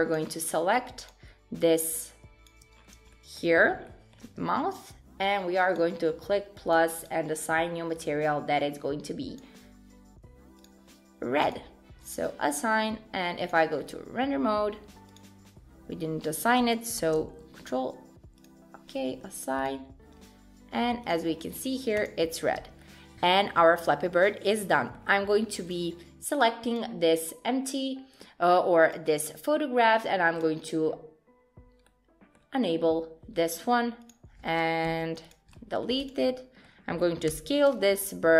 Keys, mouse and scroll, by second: 2.8-3.1 scroll down 6, 3.1 shift+middle click, 3.5-4.8 scroll up 4, 3.8 shift+middle click, 5.7 click, 6.7 click, 7.0 click, 8.0 click, 11.5 click, 12.1 click, 12.5-13.5 scroll down 1, 13.5 click, 13.5-14.9 scroll down 3, 15.1 click, 16.1-16.4 scroll up 5, 17.3 ctrl+z, 18.4 click, 19.7 click, 21.1 click, 21.4-22.0 scroll down 6, 22.0 click, 22.6 Tab, 22.8 middle click, 24.7 middle click, 25.8 click, 26.8 click, 28.2 middle click, 28.8 click, 30.0 click, 30.4 click, 31.9 middle click, 34.0 middle click, 34.0 click, 34.9 x, 35.5 middle click, 36.0 click, 36.3 middle click, 37.3 s.